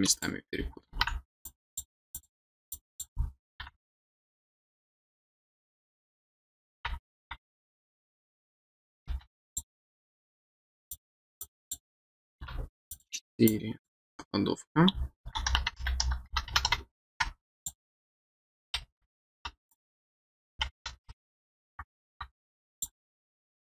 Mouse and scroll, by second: 1.4 click, 2.1 click, 2.7 click, 8.1 click, 9.4 click, 10.9 click, 11.4 click, 12.9 click, 13.4 click, 17.5 click, 19.7 click, 22.7 click.